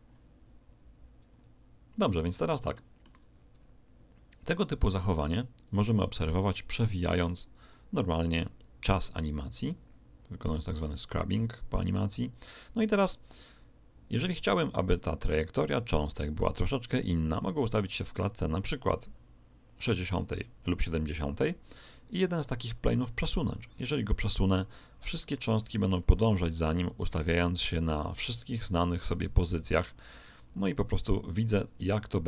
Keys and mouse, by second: 2.3-4.5 middle drag, 5.6 click, 22.0 right click, 24.5 g, 31.8 r.